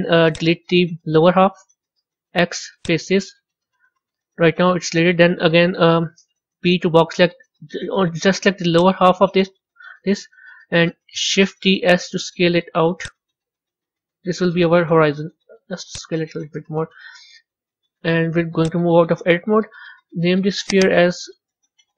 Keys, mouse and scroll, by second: 3.6 middle click, 4.1-5.5 middle drag, 5.5 KP_1, 11.4 shift+d, 13.3-14.9 middle drag, 17.2 Tab, 17.9 z, 20.6 click, 20.7-21.9 drag.